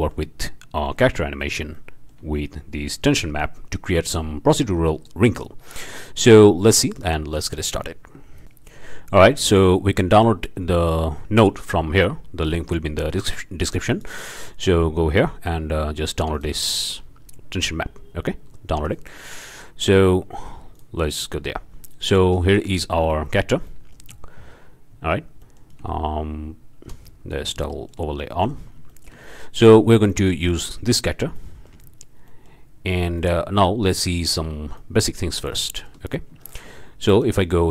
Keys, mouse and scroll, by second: 0.1 click, 0.3-2.6 drag, 2.7 click, 3.1 drag, 3.4 click, 3.6 click, 3.8 click, 4.0 click, 4.2 scroll up 2, 4.4 scroll down 2, 4.5 drag, 4.6 click, 4.6 m, 5.4 scroll down 2, 5.4 click, 5.7 scroll up 2, 5.7 click, 6.0 click, 6.3 click, 6.4-7.7 drag, 8.4 click, 13.9 click, 16.3 click, 18.8 drag, 20.7 click, 21.9-22.6 shift+drag, 22.7-23.1 shift+drag, 25.9 z, 28.2-28.6 shift+right drag, 28.9-29.6 shift+drag, 29.9 shift+click, 30.7 click, 32.8 scroll up 1, 33.2 click, 34.7 click, 35.7-36.3 shift+drag, 36.4-36.8 shift+drag, 37.1 click.